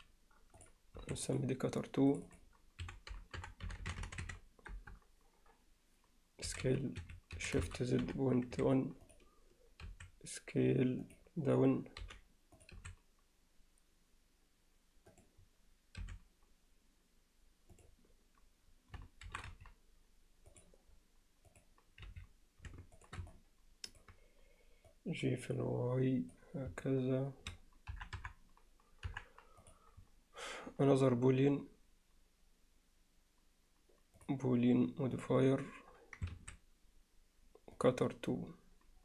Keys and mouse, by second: 0.6 click, 1.0 s, 2.1-5.0 drag, 3.8 t, 7.4 s, 9.9 s, 12.0 g, 12.8 s, 16.0 r, 19.3 shift+d, 21.5 click, 22.1 z, 23.3-24.0 middle drag, 24.9-26.4 drag, 26.8-27.5 middle drag, 27.9 KP_1, 28.2 KP_3, 29.1 KP_1, 34.3-35.5 drag, 36.3 ctrl+s, 37.8-39.0 drag.